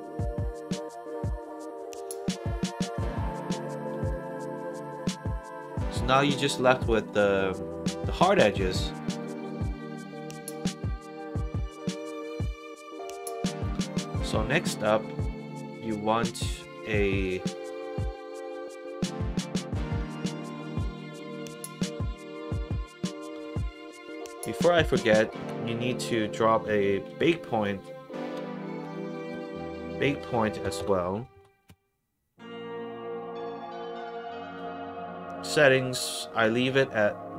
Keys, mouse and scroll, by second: 0.3 click, 4.0 alt+right click, 4.4 alt+click, 5.0 alt+middle click, 5.4 alt+click, 5.8 alt+middle click, 6.2 alt+click, 6.6 alt+middle click, 6.8 alt+right click, 7.2 alt+click, 7.6 alt+middle click, 8.0 alt+right click, 8.2 alt+click, 8.5 alt+right click, 8.8 alt+middle click, 9.1 alt+right click, 9.4 alt+click, 9.8 alt+middle click, 10.3 middle click, 10.7 alt+click, 11.9 middle click, 12.0 scroll down 1, 12.2 middle click, 13.0 click, 14.3 middle click, 16.6 click, 24.0 click, 24.7 click, 25.1 click, 25.4 Tab, 26.3-27.7 typing, 28.8-30.6 typing, 31.3 Down, 36.1 click.